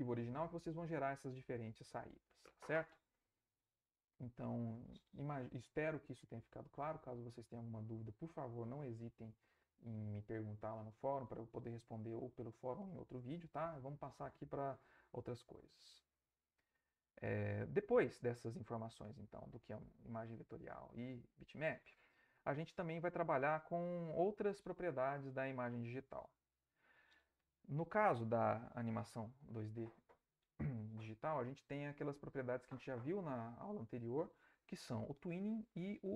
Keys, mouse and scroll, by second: 14.8 alt+Tab, 17.8 Right, 19.9 Right, 21.4 Right, 23.2 Right, 25.3 Right.